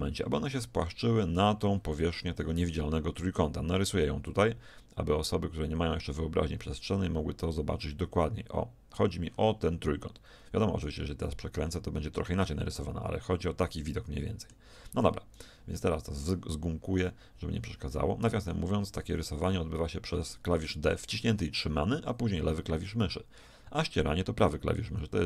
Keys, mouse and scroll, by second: 1.0-3.8 middle drag, 3.8 d, 4.1 d, 9.0 d, 11.8 middle click, 15.1 d, 15.4-20.1 drag, 15.4 d, 20.1-21.2 d.